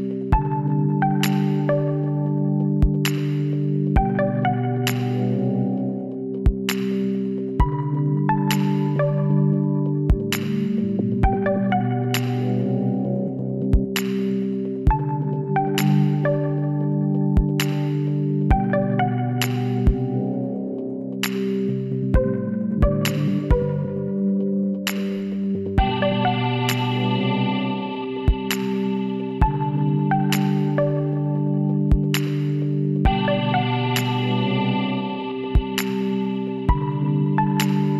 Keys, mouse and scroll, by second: 1.3 e, 5.2 e, 9.7 e, 13.0 middle click, 15.1-16.6 drag, 17.3-19.1 drag, 18.1-22.0 right drag, 22.0-24.0 middle drag, 23.1 w, 26.4 Tab, 29.6-31.1 middle drag, 31.2 middle click, 32.0 Tab, 32.6 middle click, 37.1 Tab, 37.4 middle click.